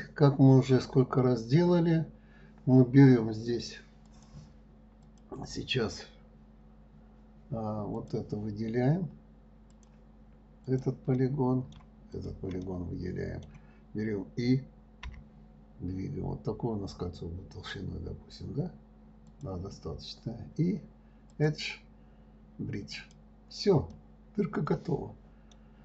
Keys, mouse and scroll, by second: 4.4 click, 5.4 click, 8.3 click, 10.1 click, 11.0 click, 11.5-12.5 middle drag, 12.5 shift+click, 13.0-15.4 middle drag, 21.7-24.3 drag, 24.3-25.8 middle drag.